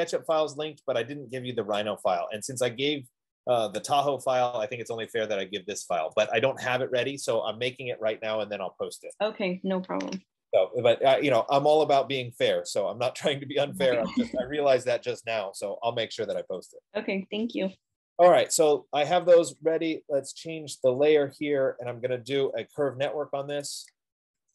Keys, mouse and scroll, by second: 1.9 click, 4.0 Return, 5.9 click, 6.3 Escape, 12.9 click, 16.8 click, 17.1 click, 17.9 middle click, 18.0 middle click, 21.3 click, 23.7-24.2 typing.